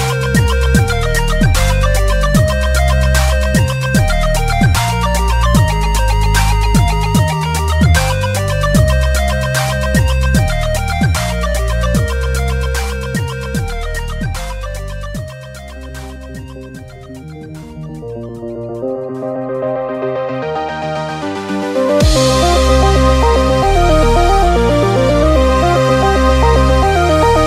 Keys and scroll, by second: 0.8 p.